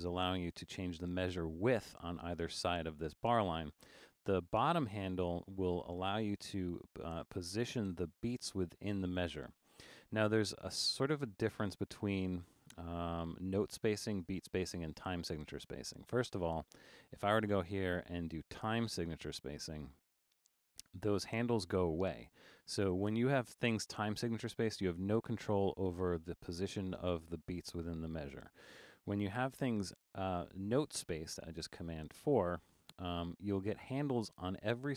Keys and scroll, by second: 16.3 super+a, 28.1 super+a, 29.5 super+4.